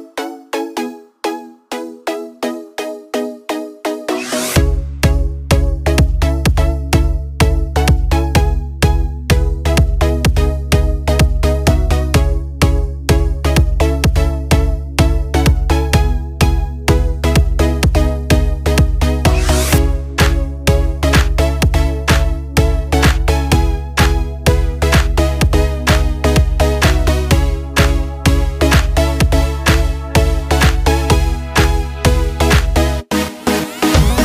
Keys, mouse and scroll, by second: 7.4 click, 9.7 click, 10.5 click, 12.9 click, 14.5 scroll down 1, 15.5-16.0 scroll down 1, 18.3 click, 18.9-19.6 scroll down 1, 19.6 click, 22.3 click, 26.7-28.2 scroll down 1, 29.0-29.4 scroll down 1, 29.4 click, 29.9-31.7 scroll down 1, 31.7-34.2 drag.